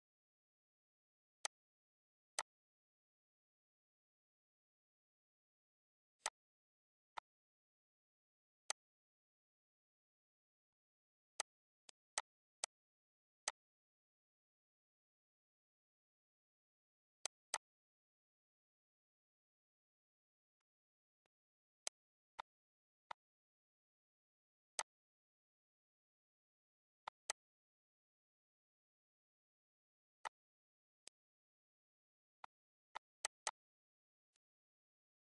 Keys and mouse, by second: 1.4 click, 2.4 click, 3.5 click, 4.4 click, 6.2 click, 6.7 click, 7.2 click, 8.7 click, 9.6 click, 10.2 click, 10.7 click, 11.4 click, 11.8 shift+click, 12.4 click, 13.2 click, 14.2 click, 16.3 click, 16.9 shift+click, 18.2 click, 19.4 click, 20.6 click, 21.0 ctrl+s, 21.3 click, 21.9 click, 22.4 click, 23.0 click, 24.8 click, 27.0 click, 27.6 ctrl+s, 30.2 click, 31.0 shift+click, 31.4 click, 32.2 shift+click, 32.6 shift+click, 33.7 click.